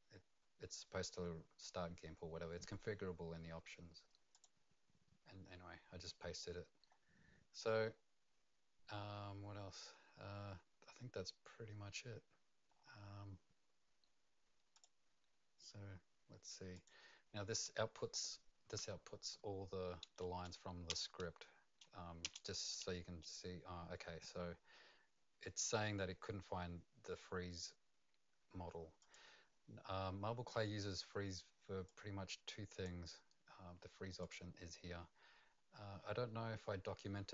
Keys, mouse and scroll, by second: 4.3 click, 5.6-6.3 scroll down 4, 6.3-6.9 scroll down 3, 6.9 scroll up 1, 12.7-14.7 scroll up 5, 14.7 click, 16.7 click, 20.9 Return, 22.2 Return, 29.0 click, 31.8 click.